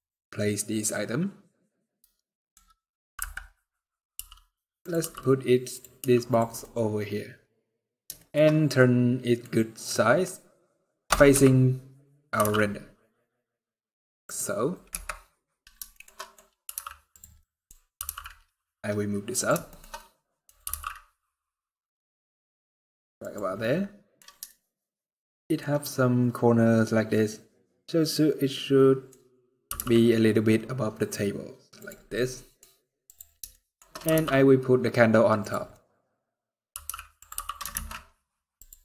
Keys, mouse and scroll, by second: 2.3 scroll down 1, 2.9 KP_7, 3.9 r, 4.7 g, 5.7 r, 6.3 middle click, 7.3-7.7 scroll up 3, 7.7 scroll down 1, 7.9 shift+middle click, 8.1 scroll up 2, 8.5 middle click, 9.6 middle click, 11.0 KP_0, 12.1 g, 14.6 KP_0, 15.4 scroll down 1, 15.6 shift+middle click, 15.8 middle click, 16.1 scroll up 2, 16.3 r, 17.1 middle click, 17.4 scroll up 2, 17.7 g, 19.4 shift+middle click, 19.7 middle click, 20.3 g, 23.3 middle click, 24.2 shift+middle click, 25.4-26.0 scroll up 4, 26.3-27.0 scroll down 3, 27.0 middle click, 29.4 g, 31.7 scroll down 3, 31.8 middle click, 32.8 click, 33.2 shift+middle click, 33.8 g, 35.4 middle click, 36.2 scroll down 2, 36.4 r, 37.0 g, 38.7 middle click.